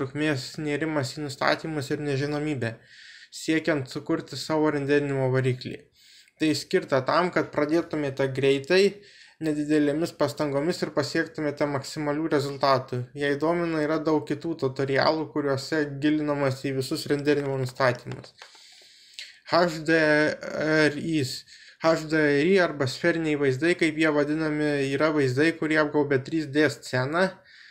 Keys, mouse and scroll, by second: 10.7 click, 12.8-14.9 drag, 14.9 middle click, 15.6 middle click, 17.6 middle click, 26.5-27.7 drag.